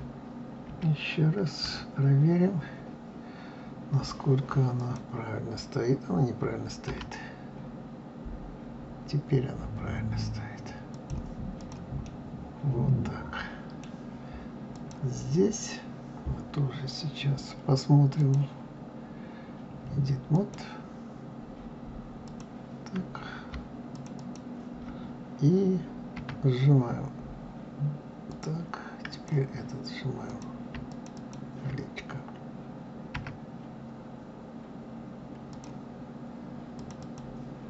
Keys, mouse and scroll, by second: 0.6 KP_1, 1.6 KP_3, 2.8-3.2 scroll up 3, 4.7 click, 6.8 r, 11.5 click, 12.0-14.7 middle drag, 14.7 click, 18.1-21.1 drag, 22.2 click, 23.9 shift+click, 24.1 shift+click, 26.1 s, 29.0 click, 30.2 click, 30.8 shift+click, 31.1 shift+click, 33.1 s, 36.7 click, 36.9 click.